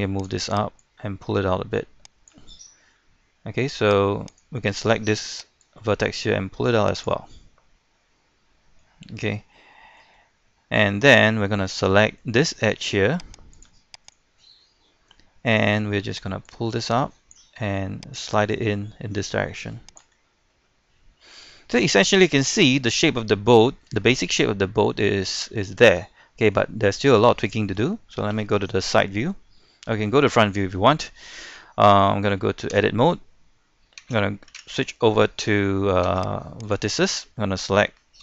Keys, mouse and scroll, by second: 2.9-4.1 middle drag, 4.3 right click, 4.6 middle click, 5.6-7.2 drag, 7.2-7.5 scroll down 1, 7.5 middle click, 9.0-9.5 scroll up 1, 9.5-11.9 middle drag, 12.7 ctrl+Tab, 13.5 click, 14.1 right click, 14.6 middle click, 16.5-20.3 drag, 20.3 scroll down 1, 20.5 middle click, 21.6-21.9 scroll up 1, 21.9 middle click, 23.3 scroll down 1, 23.6-26.7 shift+middle drag, 28.3 KP_1, 32.7 Tab, 36.1 ctrl+Tab, 36.7 click.